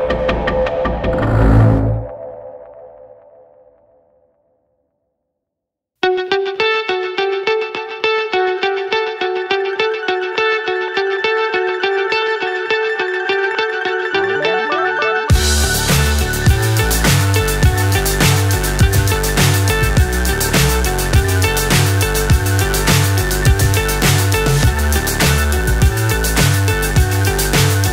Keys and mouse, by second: 0.0-6.1 drag, 6.8-10.0 drag, 12.0-13.0 drag, 14.3 click, 15.5-16.5 drag, 18.5-21.8 drag, 22.1-23.7 drag, 23.9-25.7 drag, 26.2-27.2 drag.